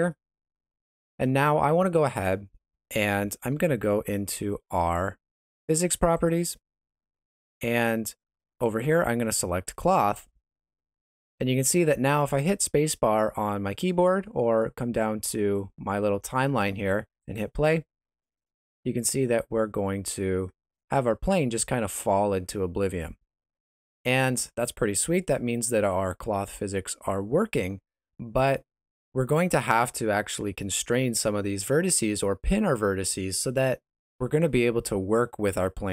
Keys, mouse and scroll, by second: 0.4 ctrl+middle click, 1.4 shift+middle click, 6.1 click, 9.6 click, 17.2 click, 19.2 middle click, 22.4 middle click, 25.3 Escape.